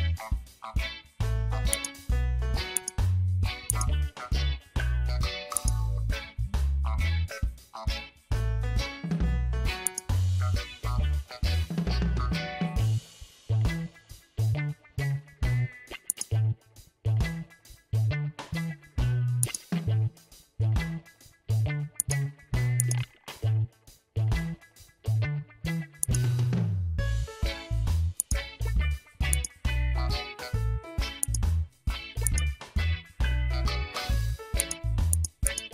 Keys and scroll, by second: 7.5 ctrl+t, 13.2 Return.